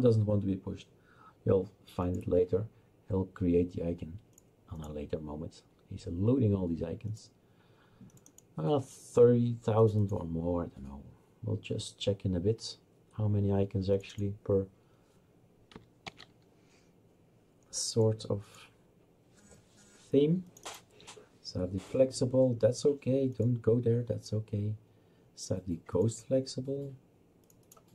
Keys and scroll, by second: 16.1 ctrl+v.